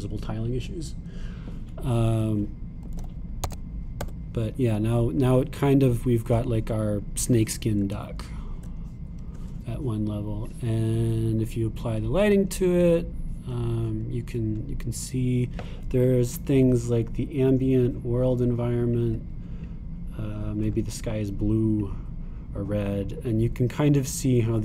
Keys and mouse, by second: 15.0 middle click, 17.6 click.